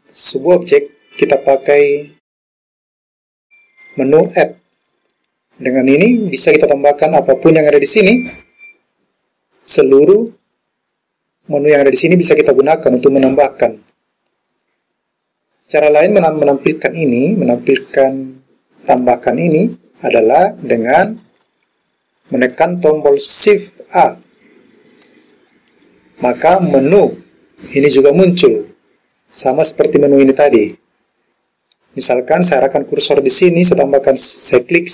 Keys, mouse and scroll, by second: 4.3-15.9 drag, 16.2 click, 19.0 click, 25.1 shift+a, 30.3-31.4 drag.